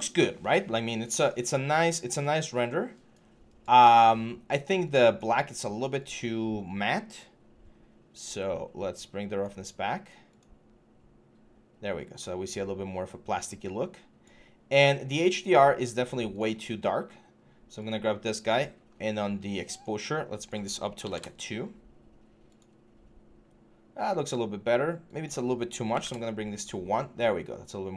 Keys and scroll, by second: 20.8 2, 20.8 Return, 25.7 1, 25.7 Return.